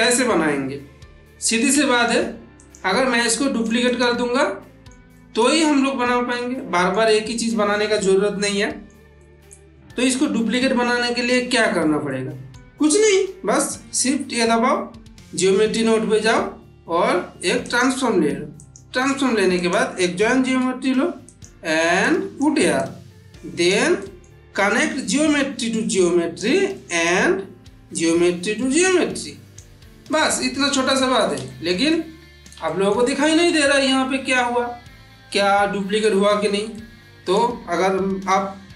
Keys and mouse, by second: 1.5 click, 1.7 shift+middle click, 2.5 click, 3.1-4.0 middle click, 3.7 click, 4.2-4.8 middle drag, 6.4-7.1 shift+middle drag, 8.4-8.9 middle click, 10.4-11.3 middle drag, 11.9-12.6 middle drag, 13.7 shift+a, 17.5 click, 18.5 click, 19.5 click, 20.5 shift+d, 21.1-22.5 drag, 23.9 middle click, 25.4-26.4 click, 26.6-27.2 middle click, 27.8-29.7 drag, 29.9-31.2 middle drag, 36.6-37.2 ctrl+middle drag, 38.2 n.